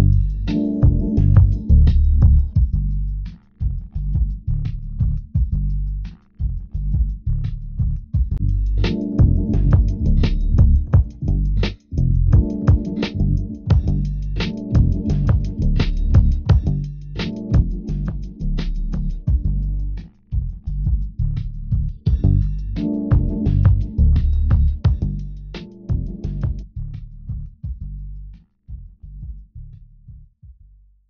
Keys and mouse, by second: 10.5 g, 13.5-15.3 drag, 17.0 Tab.